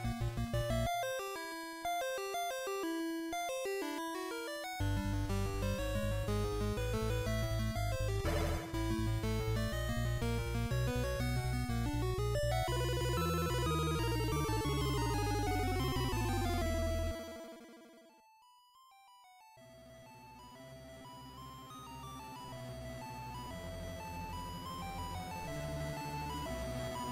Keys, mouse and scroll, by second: 2.0 right click, 3.9 shift+v, 7.0 click, 9.0 alt+right click, 10.3 s, 16.2 click, 18.5 middle click, 23.2 e, 24.3 right click, 25.8 ctrl+z.